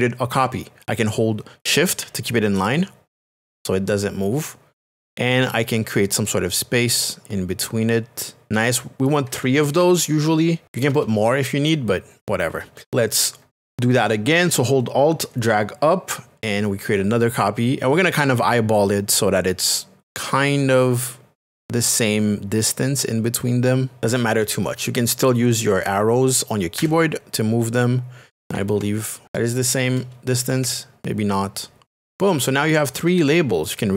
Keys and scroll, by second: 10.6 space, 26.7 Right, 30.6 Left, 32.1 Right.